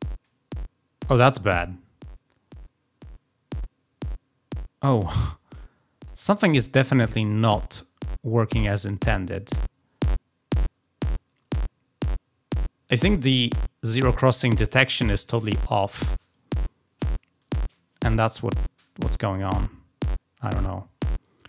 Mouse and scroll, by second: 0.6 middle click, 2.0-6.0 drag, 6.6-11.0 drag.